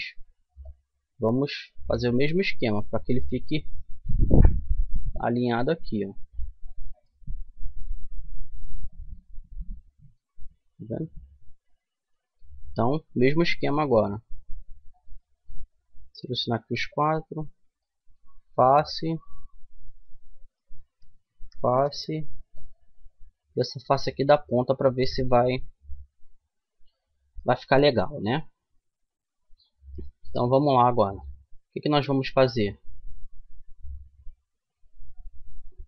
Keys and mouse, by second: 2.0 click, 3.2-5.6 right drag, 4.8-6.6 drag, 7.3-10.6 middle drag, 11.5-14.7 middle drag, 14.7-16.8 right drag, 16.8 f, 17.5-18.5 middle drag, 18.5-21.9 right drag, 21.0 f, 22.2-23.2 drag, 23.2 middle click, 24.0 click, 24.6 f, 25.7-29.2 middle drag, 29.9-31.9 middle drag.